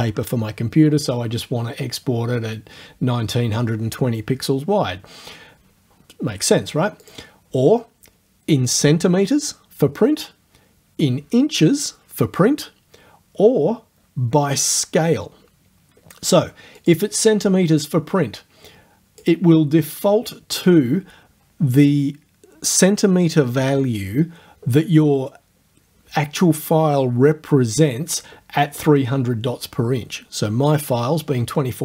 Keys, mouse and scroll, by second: 7.0 click, 16.8 click, 18.7 click.